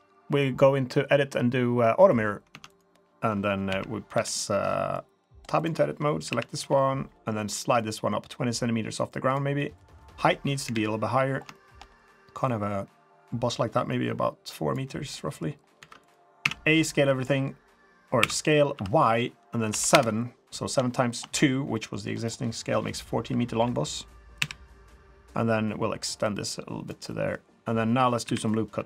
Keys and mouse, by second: 2.5 Tab, 2.7 click, 3.7 KP_1, 4.1 KP_3, 4.9-5.2 drag, 6.3 KP_1, 6.6 KP_3, 7.8-9.3 drag, 9.6 middle drag, 10.6 KP_3, 11.5 shift+middle drag, 12.4-14.7 drag, 15.2 middle drag, 15.8 3, 16.0 click, 16.4 a, 16.9 middle drag, 18.2 s, 20.9 shift+middle drag, 21.7 middle click, 22.2 click, 23.2 KP_1, 23.6 KP_3, 24.4 KP_1, 26.2 click, 27.1 middle click, 28.2 KP_3.